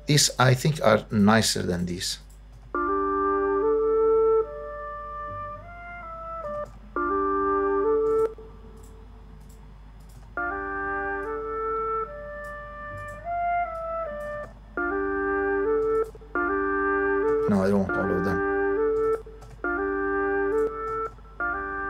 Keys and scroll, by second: 2.5 space, 6.4 space, 8.0 space, 10.1 space, 14.2 space, 15.8 space, 17.3 space, 18.9 space, 20.9 space.